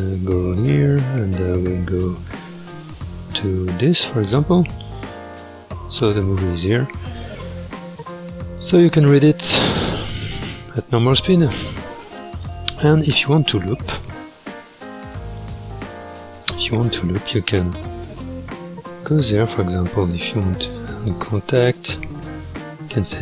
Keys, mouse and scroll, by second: 4.6-5.3 scroll up 7, 5.6-6.0 scroll down 3, 6.0 scroll down 2, 6.1-6.4 scroll up 2, 6.4 click, 7.0-8.0 scroll, 8.0 click, 8.9 space, 13.1 space, 15.4 click, 16.3-16.6 scroll up 1, 17.9-20.8 drag, 23.1-23.2 drag.